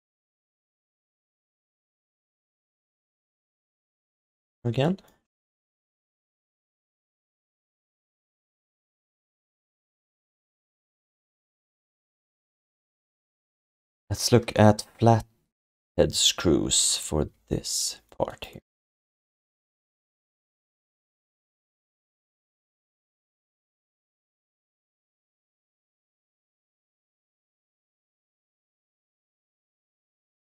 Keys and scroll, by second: 0.5 w, 3.3 ctrl+shift+d, 5.9 ctrl+s, 17.3 f, 18.9 1, 20.0 3, 20.8 6, 22.1 5, 22.9 ctrl+s, 29.5 ctrl+alt+r.